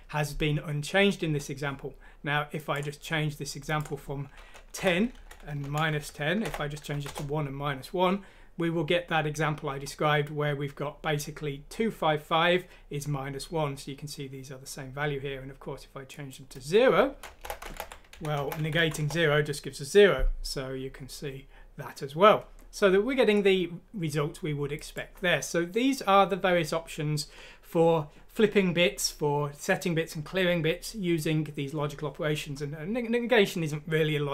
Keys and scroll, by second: 5.9 shift+End, 6.4 BackSpace, 6.9 F6, 7.1 Return, 17.4-18.6 typing, 18.8 F6.